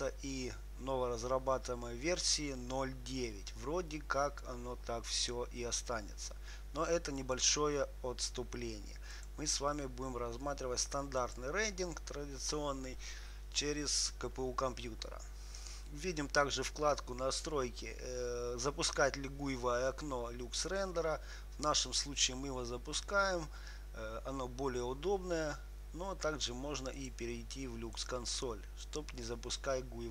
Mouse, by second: 16.9-18.8 drag, 28.3-30.1 drag.